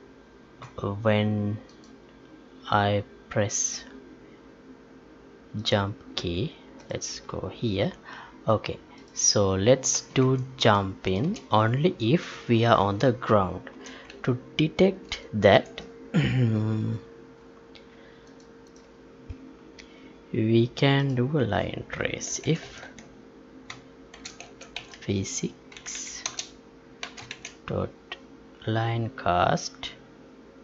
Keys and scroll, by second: 10.2 Up, 14.0 Up, 15.5 Up, 22.6 Tab, 25.7 Down.